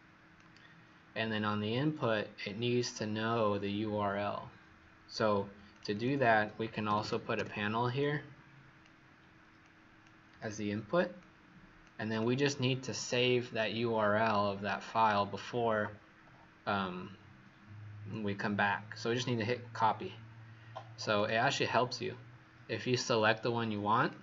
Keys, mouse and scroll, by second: 5.9 click, 6.8 typing, 7.3 Return, 8.0 click.